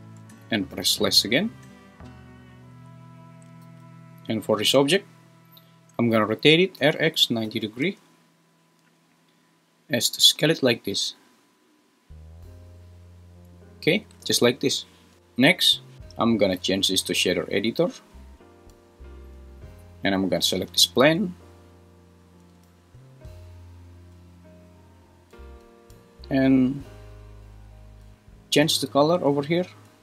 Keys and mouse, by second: 0.8 /, 3.6 g, 5.3 click, 6.8 r, 7.0 x, 7.4 9, 7.4 0, 7.9 Return, 8.8 s, 15.9 Escape, 16.5-17.7 drag, 28.1 click, 29.0-29.5 drag.